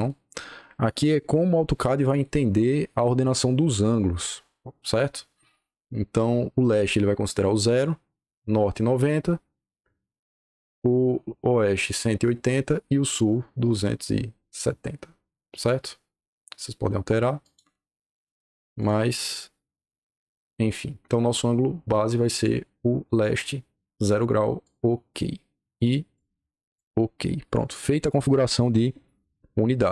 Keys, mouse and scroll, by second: 0.0-2.0 drag, 17.3 click, 18.2 click, 18.7 click, 19.8 click, 24.5 click, 26.0 click, 29.8 l.